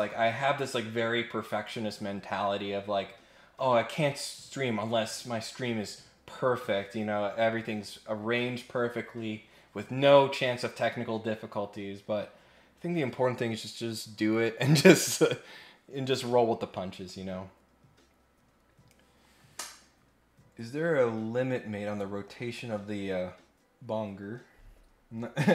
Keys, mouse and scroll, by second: 25.0-25.3 scroll down 4.